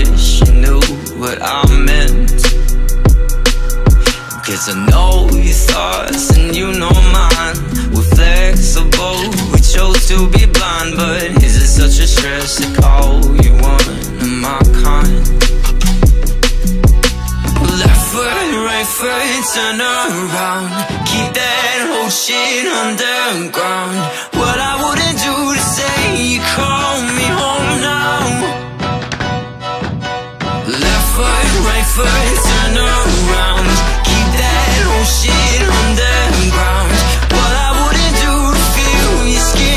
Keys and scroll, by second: 32.0 scroll, 32.6-33.9 scroll.